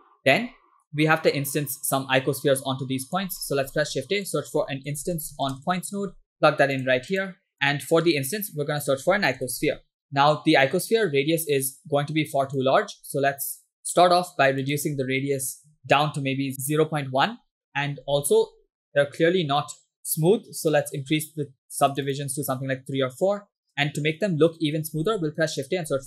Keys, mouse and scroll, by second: 0.0 shift+middle click, 0.2 scroll down 2, 1.4-3.2 drag, 3.4 middle click, 3.7 shift+a, 7.5 click, 7.6 middle click, 8.1 shift+a, 10.0 BackSpace, 11.7-12.8 drag, 14.0-14.3 scroll up 2, 14.7-16.5 drag, 15.8 BackSpace, 18.0-20.7 scroll up 5, 20.8 middle click, 21.0-21.8 scroll up 2, 21.8 click, 23.7 scroll down 2, 25.0 shift+a.